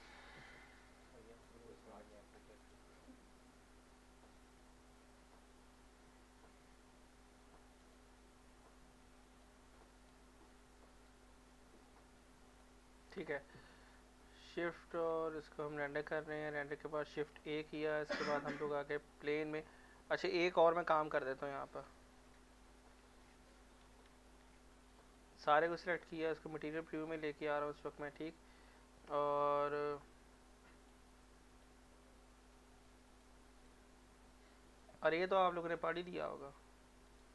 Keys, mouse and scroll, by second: 1.0 click, 1.2-2.6 drag, 7.8-11.1 drag, 11.1-13.5 drag, 13.5 scroll down 1, 13.7 middle click, 13.7 middle click, 13.9 scroll up 1, 14.4-15.1 z, 15.5 scroll down 1, 15.9-17.0 middle drag, 17.3 shift+a, 19.7 middle click, 22.5 z, 23.2 middle click, 23.6 scroll up 1, 23.9 z, 24.5 z, 24.9 click, 26.0 z, 26.7 middle click, 27.0 scroll up 1, 27.3 middle click, 28.0 scroll down 1, 28.7 scroll up 1, 29.0 middle click, 31.3-31.8 drag, 32.9 click, 33.7-37.0 drag, 37.0 right click.